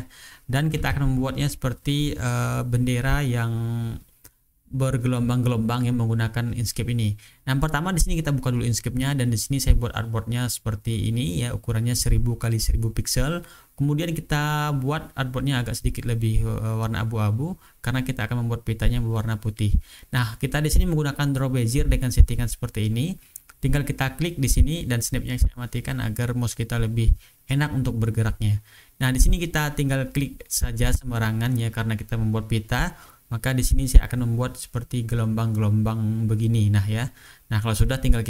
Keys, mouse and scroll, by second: 0.2 ctrl+scroll down 1, 0.2 click, 0.3 ctrl+scroll up 2, 0.5 ctrl+scroll down 2, 0.7 click, 0.9 click, 3.1 click, 8.0 ctrl+scroll down 2, 8.4-9.3 ctrl+scroll up 2, 9.9 click, 12.3 click, 13.4 click, 14.0 ctrl+scroll down 2, 14.3 ctrl+scroll up 2, 16.6 click, 19.7 click, 20.7 click, 24.4 click, 27.4 click, 28.5 click, 29.1 click, 30.2 click, 31.6 click, 32.4 click, 33.6 click, 34.4 click, 35.4 click, 36.1 click, 36.9 click, 37.6 click.